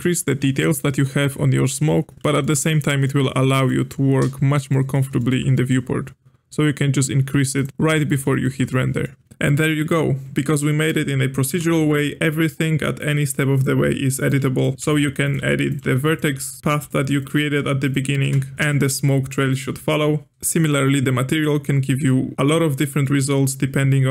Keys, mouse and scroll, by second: 0.6-7.5 middle drag, 7.5 click, 8.0-9.2 middle drag, 9.2 click, 10.6 middle click, 11.5 Tab, 13.6 click, 14.3 click, 14.8-17.4 typing, 18.2 Tab, 18.5-20.5 shift+middle drag, 21.2-22.1 scroll up 5, 22.1-24.1 middle drag.